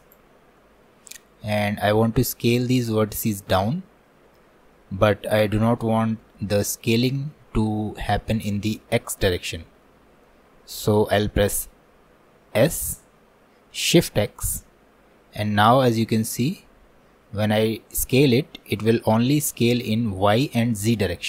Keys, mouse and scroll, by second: 0.6-12.6 middle drag, 12.6 s.